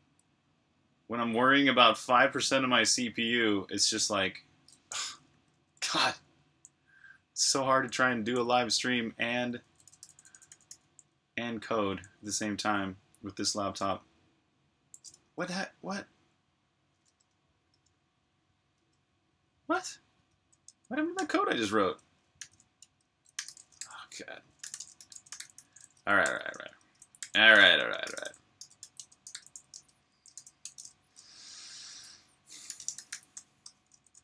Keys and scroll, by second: 5.1 Escape, 5.2-10.3 typing, 11.8 j, 15.1 u, 17.0-17.6 typing, 18.7 shift+u, 20.5-21.1 typing, 22.4-25.0 typing, 26.1 typing, 28.0-29.2 typing, 32.3-34.2 typing.